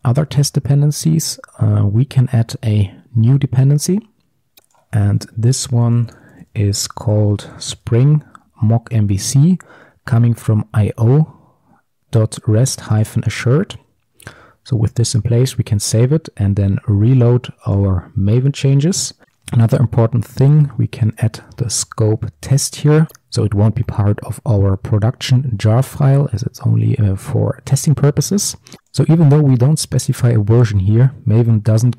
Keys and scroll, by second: 1.6 Return, 8.7 Return, 14.5 ctrl+s, 17.8 ctrl+shift+super+o, 20.8 Return, 22.5 ctrl+s.